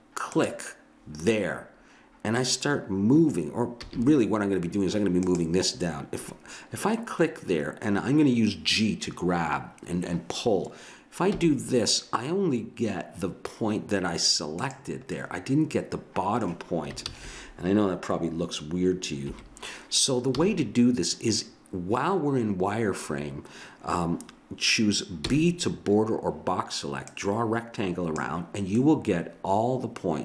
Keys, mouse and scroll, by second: 0.3-2.0 drag, 3.8 a, 5.2-7.0 drag, 11.3 g, 15.2-16.2 middle drag, 17.1 ctrl+z, 19.3 KP_1, 20.3 a, 25.3 b, 28.8-30.2 middle drag.